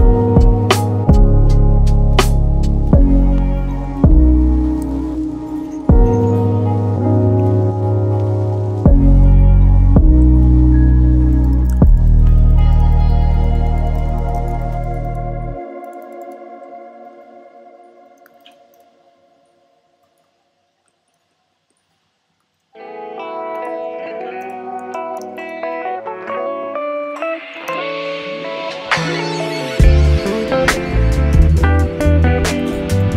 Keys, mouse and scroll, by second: 1.2 a, 1.9-3.5 drag, 3.5 Tab, 3.9-4.9 middle drag, 4.9 ctrl+a, 6.3 click, 7.4 ctrl+a, 8.0 ctrl+a, 8.4 click, 8.9-11.2 middle drag, 11.2 Tab, 11.8 3, 12.7 click, 14.5 1, 17.2-18.3 middle drag, 18.3 3, 20.9 a, 21.3 a, 21.7 a, 22.4-24.0 drag, 24.0 Tab, 24.3 Tab, 25.2 ctrl+r, 27.7 ctrl+r, 29.6 ctrl+r, 31.0 middle click, 31.2 click, 31.4 click, 32.0 middle click, 32.8 shift+d.